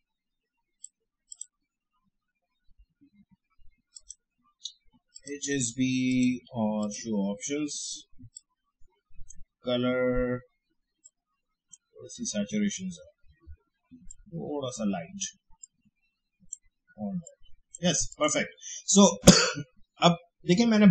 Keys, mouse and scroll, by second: 3.9-14.1 drag, 14.1-18.1 drag.